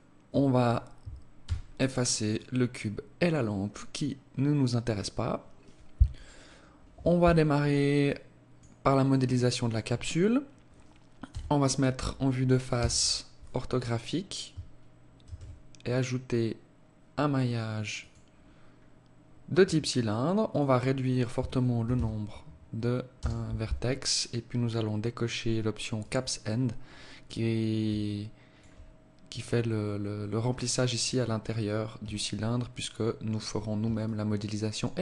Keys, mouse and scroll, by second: 1.4 x, 7.9 alt+click, 8.7 alt+click, 11.2 KP_1, 12.6 KP_5, 15.0 shift+a, 20.2 click, 25.7 click, 26.3-27.5 scroll up 6, 27.7 alt+click, 29.0 click, 30.7 click, 31.9 alt+click, 33.7 alt+click.